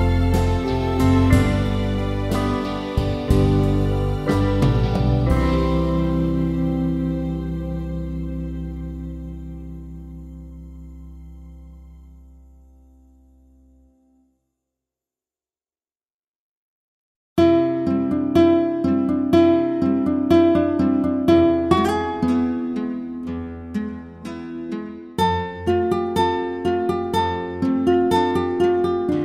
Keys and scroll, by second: 0.4 Return.